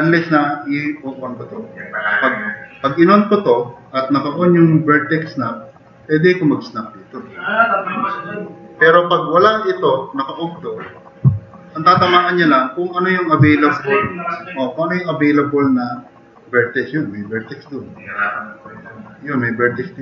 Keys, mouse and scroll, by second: 5.6 click, 11.2 middle click, 17.8 click.